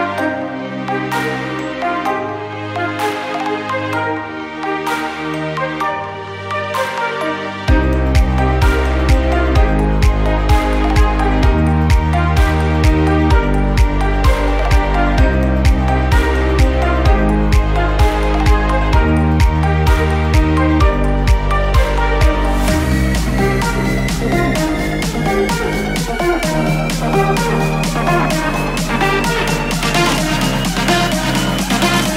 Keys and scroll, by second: 14.9 ctrl+d, 22.1 ctrl+d, 30.7 ctrl+d.